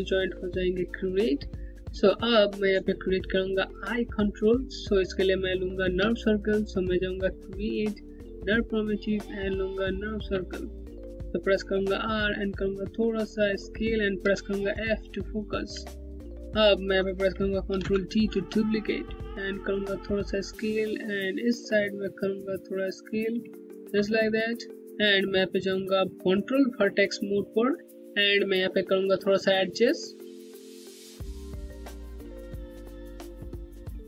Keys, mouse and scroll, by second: 1.7 z, 5.5 z, 5.6 space, 6.8 click, 7.0 space, 11.3 r, 12.0 middle click, 12.1 Home, 13.8 f, 14.7 scroll down 1, 15.4 alt+click, 15.6 Home, 17.3 ctrl+d, 18.8 middle click, 18.9 Home, 21.3 click, 21.5 Home, 22.9 scroll down 1, 23.2 alt+click, 23.8 scroll up 1, 25.0 right click, 27.5 click, 29.4 w, 30.5 click.